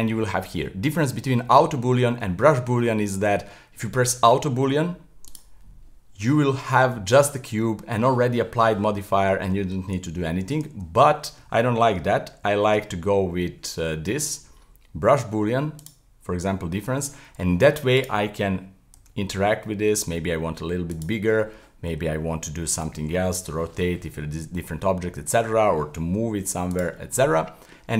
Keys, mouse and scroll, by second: 7.6-10.5 middle drag, 10.7 z, 12.4 ctrl+shift+b, 16.3-18.0 middle drag, 18.0 right click, 19.0 s, 25.0-26.1 middle drag, 26.1 g, 27.0-27.9 middle drag.